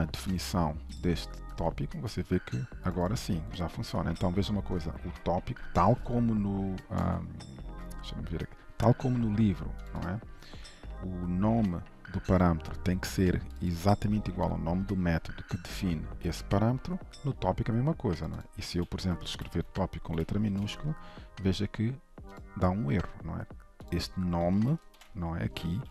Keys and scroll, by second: 1.6 ctrl+b, 4.9 ctrl+shift+Right, 7.1 ctrl+Tab, 19.4 Delete, 20.5 ctrl+s, 24.7 Delete, 25.7 ctrl+shift+Right.